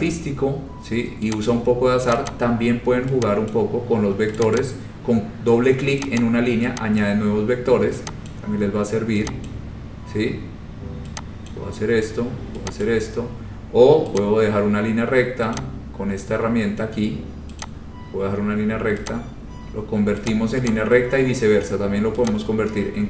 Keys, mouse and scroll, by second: 0.2-0.7 scroll, 1.5 click, 2.3 click, 2.3 scroll down 4, 2.4 click, 3.7 click, 4.5 click, 4.8 click, 4.8 scroll, 6.2 click, 6.4 click, 7.2 click, 8.4 click, 9.6 click, 11.7 click, 13.0 click, 14.4 click, 15.7 click, 17.8 click, 19.3 click, 20.4 click, 20.9 click, 22.4 click.